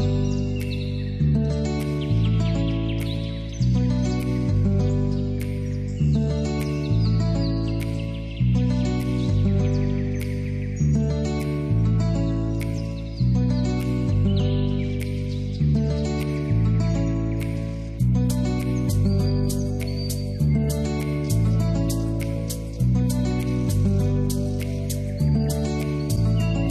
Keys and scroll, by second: 8.5 Return, 15.9 ctrl+t, 22.9 ctrl+0.